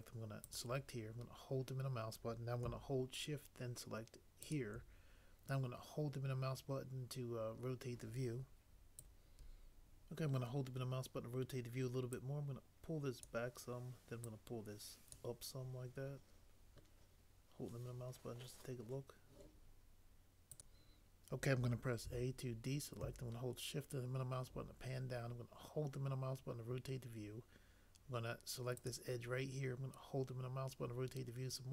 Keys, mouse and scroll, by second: 22.0 a.